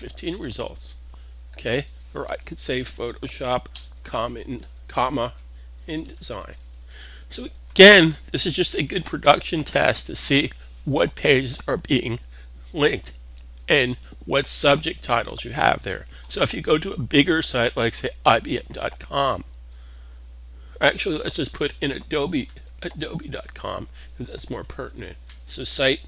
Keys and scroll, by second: 3.0-3.8 typing, 5.0-8.2 typing, 9.9-10.7 typing, 22.0-26.0 typing.